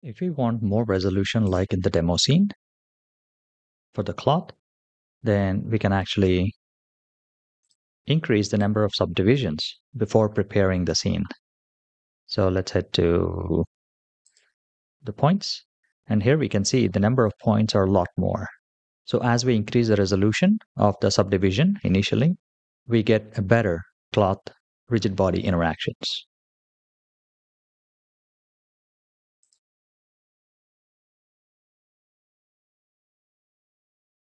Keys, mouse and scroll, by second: 1.3 click, 7.4-8.6 drag, 14.2 click, 27.4-28.0 shift+middle drag, 29.2 shift+click.